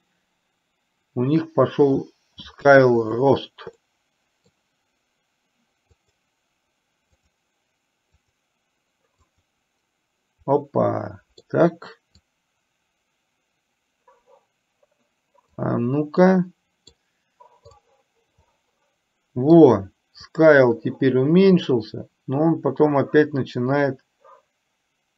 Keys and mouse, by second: 3.0 click, 3.9-4.6 middle drag, 7.2 click, 8.2 click, 9.4 click, 10.6 middle click, 12.5-15.7 drag, 16.2 middle click, 18.5-19.6 middle drag, 20.5-25.1 drag.